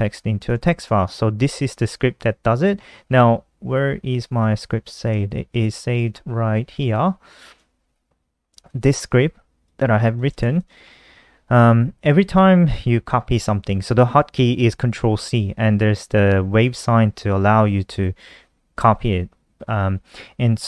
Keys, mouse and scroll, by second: 0.0 Return, 0.2 Up, 0.4 Return, 0.6 ctrl+v, 3.6 super+d, 4.9 shift+super+Left, 5.3 End, 5.4 Home, 5.5 Return, 6.5 alt+click, 8.2 click, 9.6-10.3 typing, 9.6 click, 10.1 click, 14.2-15.0 typing, 15.8 click, 20.4 click.